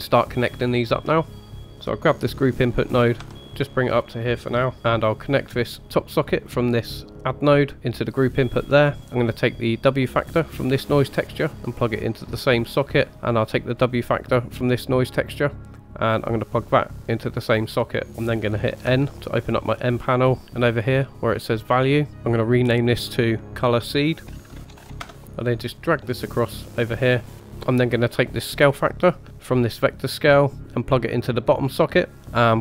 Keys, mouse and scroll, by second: 0.6 scroll up 1, 1.6 click, 1.7 ctrl+z, 3.2 g, 4.7 middle click, 4.7-5.4 scroll up 2, 6.3 click, 7.4 click, 10.5 click, 13.9-17.3 drag, 18.0 click, 18.9 n, 20.5 click, 22.7 click, 22.9 click, 24.8 e, 25.1-26.9 drag, 25.1 middle click, 27.2 middle click, 27.3 scroll up 2, 27.5-28.5 scroll down 2, 28.5-31.4 drag.